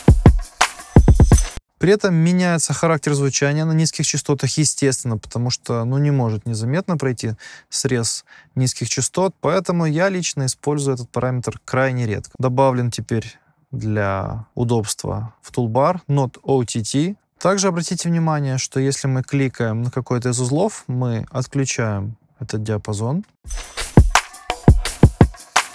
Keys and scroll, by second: 1.5 space, 23.4 space.